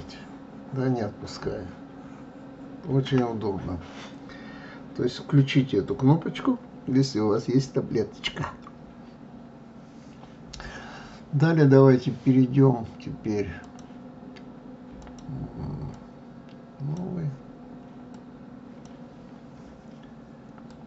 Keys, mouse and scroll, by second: 1.4-4.4 shift+middle drag, 13.6-15.1 drag, 15.9-19.0 drag.